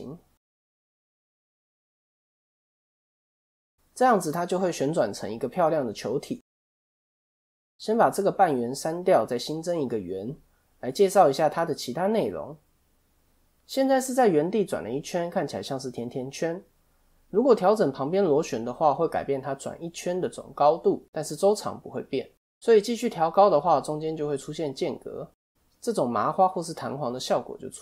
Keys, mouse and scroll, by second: 0.9 middle click, 1.4 a, 2.1 click, 5.5 middle click, 6.6 KP_1, 7.6 x, 8.9 shift+a, 10.5 click, 11.5 middle click, 12.5 click, 13.7 middle click, 13.9 scroll down 2, 14.6 scroll down 1, 14.9 middle click, 17.6 click, 19.1 middle click, 23.8 click.